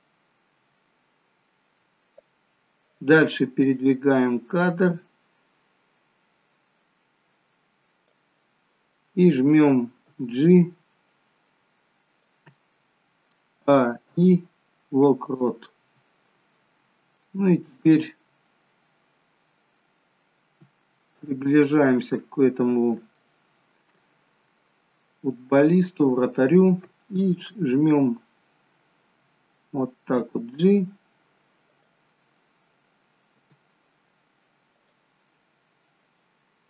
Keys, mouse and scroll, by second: 4.4 click, 10.0 g, 13.8 a, 14.0 i, 17.3 middle click, 19.5 middle click, 21.3 shift+middle click, 22.2-23.0 scroll up 6, 23.2 shift+middle click, 24.1-25.0 scroll down 4, 25.0 middle click, 29.2 middle click, 30.2 g, 32.2 middle click, 33.5 g, 35.4 middle click.